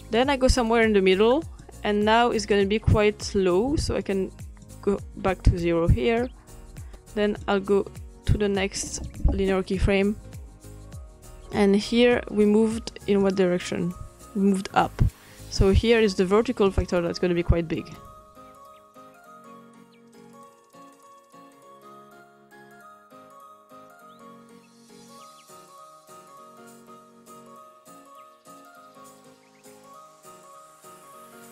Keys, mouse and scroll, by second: 4.0-6.1 drag, 6.8-10.6 drag, 13.2 click, 16.7-18.8 drag, 19.0 click, 19.4 scroll up 2, 19.7-20.6 scroll down 4, 19.9 drag, 20.6 scroll up 1, 20.7 drag, 21.0-21.3 drag, 22.4 click, 22.5-23.5 scroll up 3, 23.5-25.0 drag, 25.2 scroll down 2, 25.5-25.9 scroll up 2, 25.9-26.8 drag, 27.3 click, 28.2-29.9 drag, 30.1 click, 30.5 click.